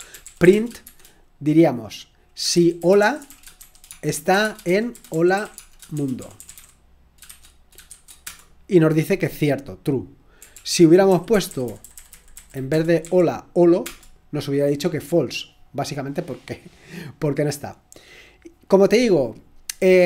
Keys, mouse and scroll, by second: 0.0-7.9 typing, 8.2 Return, 10.5 ctrl+p, 11.1 Left, 11.3 Left, 11.4 Left, 11.6-12.7 Left, 12.7-13.5 typing, 13.8 Return, 16.1-16.8 scroll down 2.